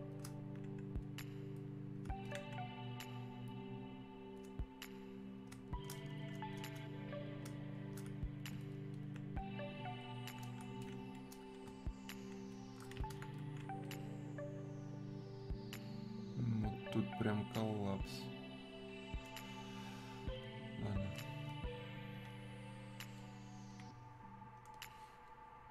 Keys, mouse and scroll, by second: 6.6-22.2 drag, 22.2-25.7 alt+drag.